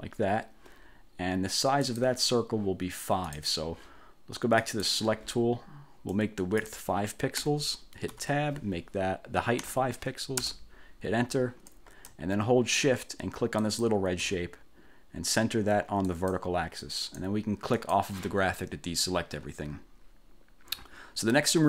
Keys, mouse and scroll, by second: 1.9 click, 3.4 click, 4.7 click, 6.2 click, 7.5 5, 8.2 Tab, 9.7 5, 10.5 Return, 13.7 shift+click, 16.2 click, 17.9 click.